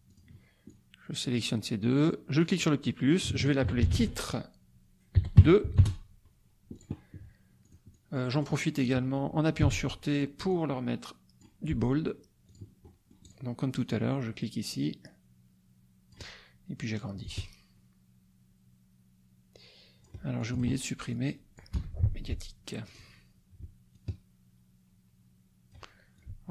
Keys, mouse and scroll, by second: 0.1 click, 0.7 click, 2.4 click, 3.4-4.7 typing, 5.8 Return, 6.7 click, 7.6 click, 9.6 t, 10.5-11.6 drag, 12.5 click, 12.8 middle click, 13.8-16.3 drag, 17.2-20.2 ctrl+drag, 20.4 ctrl+click, 21.1 click, 21.7 BackSpace, 22.8 click, 23.9-25.9 ctrl+drag, 26.2-26.5 ctrl+drag.